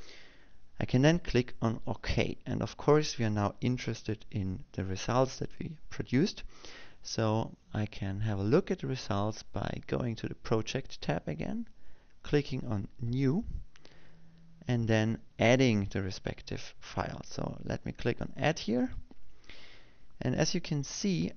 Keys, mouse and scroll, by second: 2.7 click, 11.3 click, 14.9 click, 20.5 click.